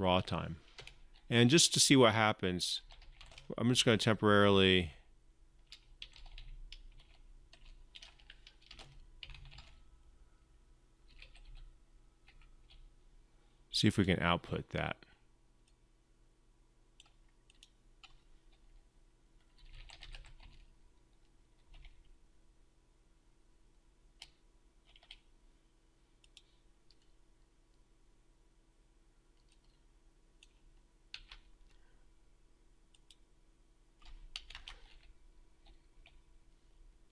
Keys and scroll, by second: 30.9 ctrl+c, 34.4 ctrl+v, 35.1 ctrl+v.